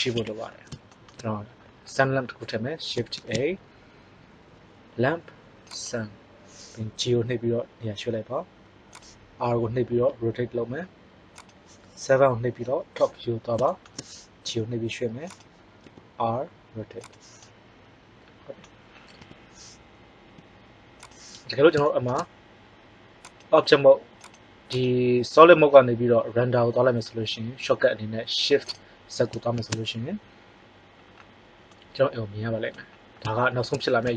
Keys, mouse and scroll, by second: 0.2 KP_1, 3.1 shift+a, 7.1 g, 9.9 r, 11.4-13.0 drag, 12.4 KP_7, 14.3 g, 15.3-17.1 drag, 15.8 r, 19.1 KP_1, 20.2 g, 29.7 shift+z.